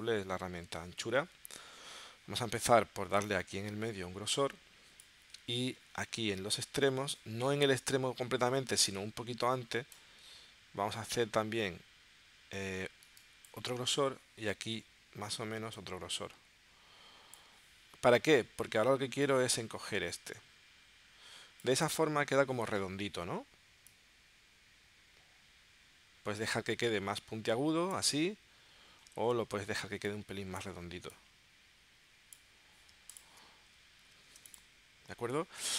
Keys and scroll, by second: 29.2 super+z, 34.3 v.